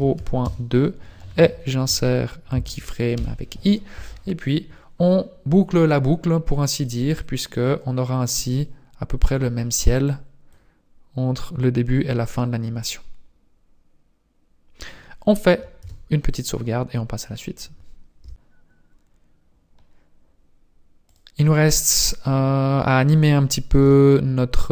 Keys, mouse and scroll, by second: 3.2 i, 7.0 click, 8.6 click, 10.0 click, 13.0 click, 15.9 ctrl+s, 21.1 click, 22.6-23.7 scroll down 3, 23.7 t, 23.8 n, 24.2 scroll down 1.